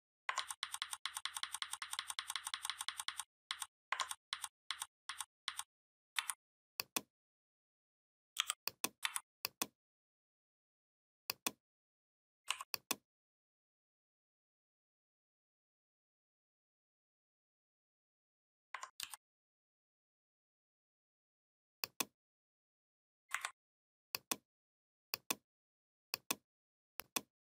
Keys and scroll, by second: 0.2 ctrl+z, 3.8 ctrl+z, 6.0 v, 8.2 i, 8.9 v, 18.8 ctrl+d, 19.3 ctrl+d, 23.1 Delete.